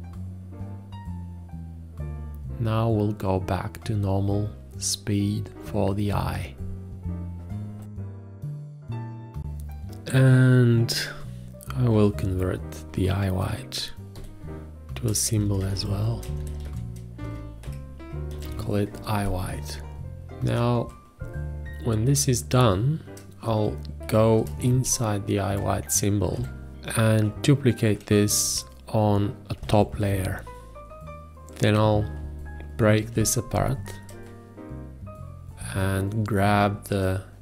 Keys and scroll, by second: 0.0-3.0 typing, 0.1 Escape, 1.5 Escape, 2.6 ctrl+z, 4.7 ctrl+s, 4.7 ctrl+a, 4.8 v, 5.0 space, 6.9 F8, 7.4-8.5 typing, 8.6 Return, 14.6 F8, 15.7-19.4 typing, 24.5 F2, 30.1 alt+z, 33.4 ctrl+b.